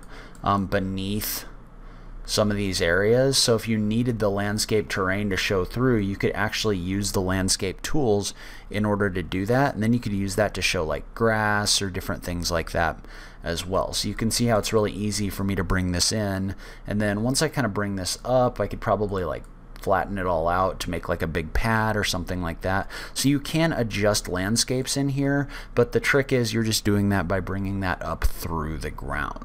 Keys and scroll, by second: 14.0 o, 26.6 o.